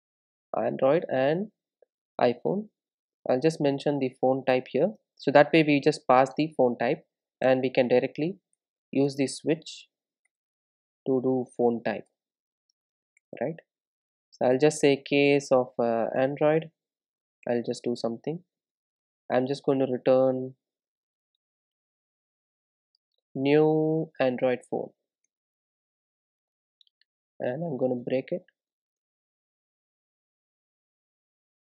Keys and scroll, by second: 6.1 Return, 16.8 Return, 22.3 Return, 29.8 Return.